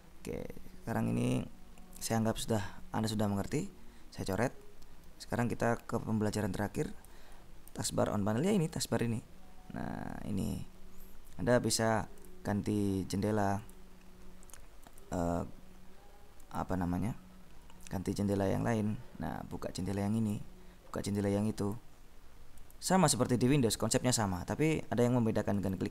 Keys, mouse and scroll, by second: 1.0-2.5 drag, 3.7 ctrl+b, 4.5 s, 5.8-7.7 drag, 7.9 ctrl+b, 12.6 click, 14.0 click, 15.3 click, 16.6 click, 18.4 click, 20.4 click, 21.8 click, 22.8 click.